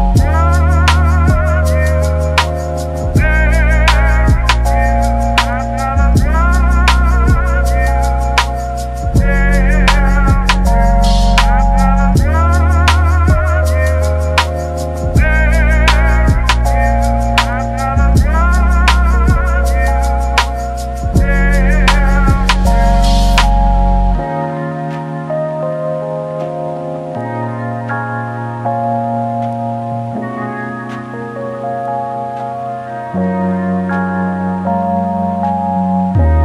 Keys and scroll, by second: 1.2 Delete, 6.0 ctrl+d, 8.4 ctrl+1, 8.4-9.8 typing, 9.8 ctrl+z, 11.3-11.6 typing, 29.5-30.5 typing, 32.4 ctrl+z, 33.3 ctrl+z.